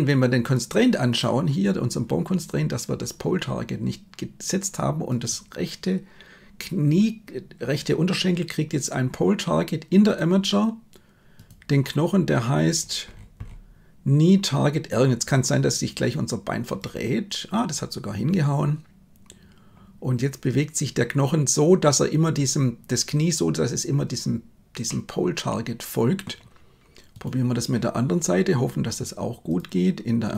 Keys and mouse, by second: 5.2-10.2 drag, 11.4-16.9 drag, 24.9-26.3 middle drag, 29.5 click.